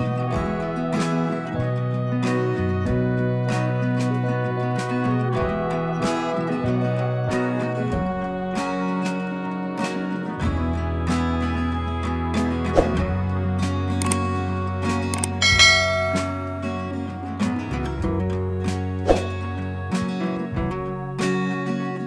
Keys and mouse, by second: 0.5 click, 3.0 click, 3.6 click, 4.4 Down, 6.2 click, 7.9 click, 10.7 click, 13.4 click, 16.8 click, 16.9 click.